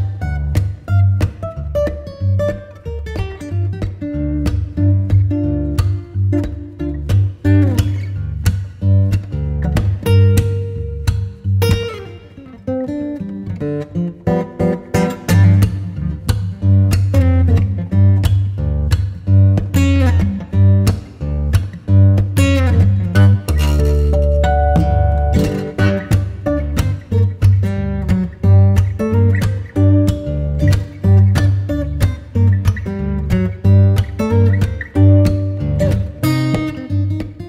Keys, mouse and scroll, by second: 0.5 ctrl+z, 1.4 g, 3.9 ctrl+z, 4.7 g, 7.2 KP_0, 9.2 ctrl+s, 9.6 click, 10.7-11.5 middle drag, 11.5 click, 15.7 click, 17.6-21.4 drag, 21.4 KP_0, 23.2-27.0 drag, 27.0-27.7 middle drag, 27.7 scroll up 5, 28.6 ctrl+s, 29.1-30.2 scroll up 1, 30.2 scroll up 2, 30.5 Tab, 31.1-33.7 right drag, 33.7-37.4 drag.